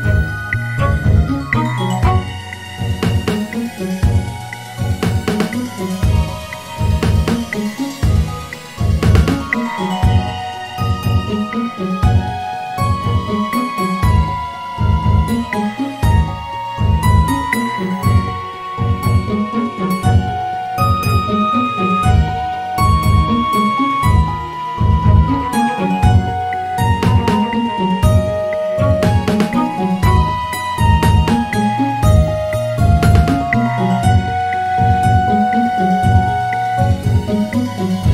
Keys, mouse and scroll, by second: 0.4 Tab, 0.9-1.6 scroll down 1, 1.6 click, 5.4-7.2 scroll down 2, 7.2 shift+a, 11.1 s, 12.8-13.6 scroll down 1, 13.6 Tab, 14.8 ctrl+r, 17.6 Tab, 18.6 s, 20.2 g, 23.1-26.2 drag, 26.7-29.6 drag, 29.6-30.5 scroll up 2, 30.5-32.5 right drag, 32.5 s, 36.0 s, 36.8 click.